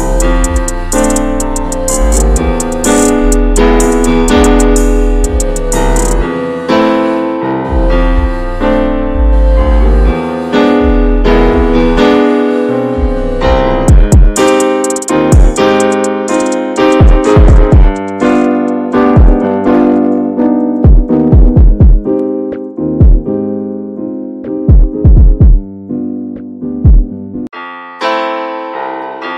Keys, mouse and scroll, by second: 1.3 middle click, 1.9-2.2 scroll up 2, 2.4 ctrl+r, 3.4 middle click, 4.1 ctrl+r, 4.8-5.1 scroll down 2, 5.1 middle click, 6.0 ctrl+r, 6.8-8.5 middle drag, 8.5 ctrl+r, 9.4-11.0 middle drag, 11.0 Tab, 11.2 click, 11.4 scroll down 2, 11.6-12.1 middle drag, 12.1-12.7 scroll up 1, 12.7-13.6 middle drag, 13.6 scroll up 1, 13.8-14.5 shift+middle drag, 14.5 Tab, 14.8-17.6 middle drag, 19.5-20.6 middle drag, 20.6 click, 20.8-21.4 middle drag, 21.4-22.2 scroll up 2, 21.7 Tab, 22.2 shift+middle click, 22.7-23.1 scroll up 2, 23.1-24.2 middle drag, 24.2-25.1 scroll up 2, 25.1 scroll down 2, 25.4-29.3 middle drag.